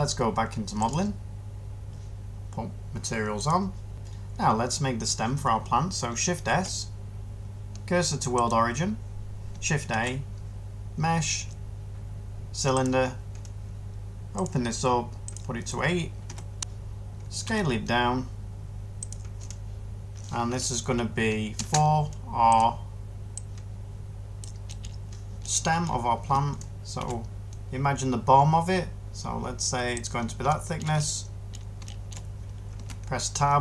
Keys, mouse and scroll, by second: 6.3 s, 9.8 a, 16.1 8, 16.5 Return, 17.3 s, 26.9 s, 32.6 Tab.